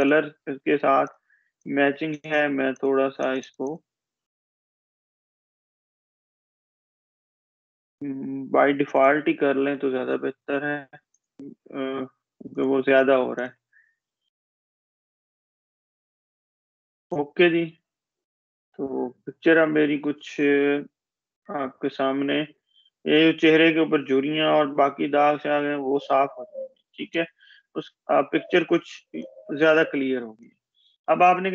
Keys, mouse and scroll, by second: 18.0 click, 26.9-29.5 space, 30.3 click, 30.6-31.0 space.